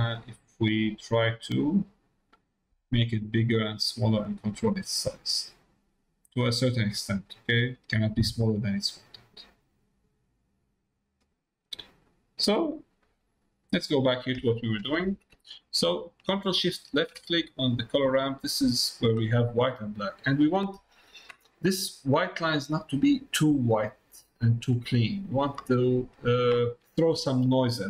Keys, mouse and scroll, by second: 1.1-3.4 drag, 5.1-9.6 drag, 9.8-11.2 drag, 11.4 middle click, 12.6 middle click, 13.1 middle click, 13.8 middle click, 16.6 ctrl+shift+click, 17.4 middle click, 23.0 middle click, 26.2 middle click.